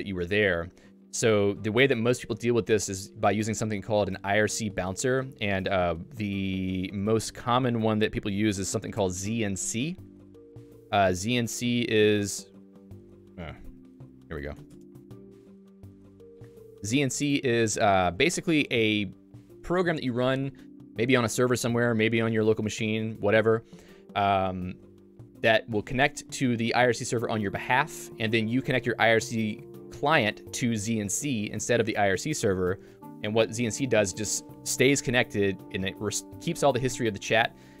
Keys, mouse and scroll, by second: 6.8 Return, 16.1 1, 18.4 super+1.